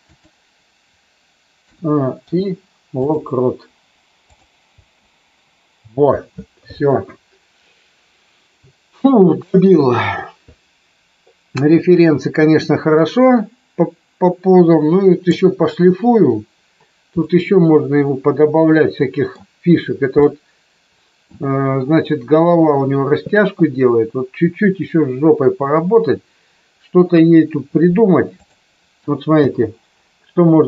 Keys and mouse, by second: 0.0 click, 1.7 a, 2.2 i, 4.7 space, 12.9-15.3 middle drag, 17.2-19.3 middle drag, 20.2-21.3 middle drag, 27.2 KP_3, 29.4 space.